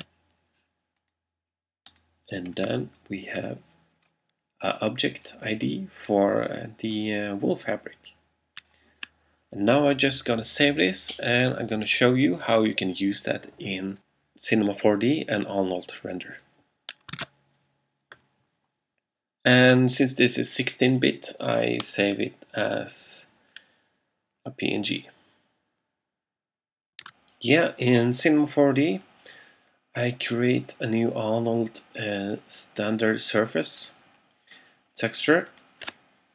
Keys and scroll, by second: 0.1 0, 17.2 shift+super+s.